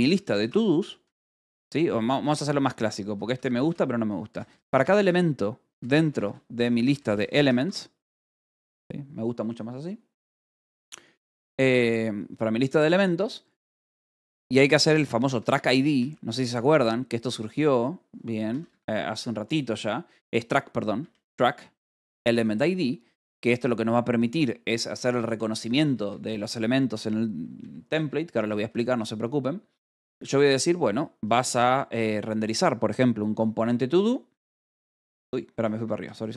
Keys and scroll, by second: 0.0-1.4 typing, 2.8-8.8 typing, 14.1-17.1 typing, 18.6 Escape, 19.7 h, 21.1 a, 21.2 BackSpace, 21.7 Escape, 23.5 l, 25.2-29.2 typing, 31.1 [, 31.5 BackSpace, 34.4 shift+Down, 35.1-36.3 typing, 35.7 Escape.